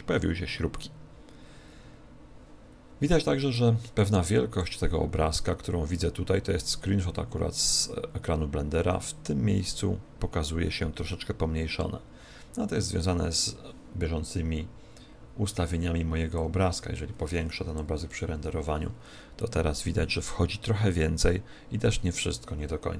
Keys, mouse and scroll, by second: 16.3 click, 18.5 F12.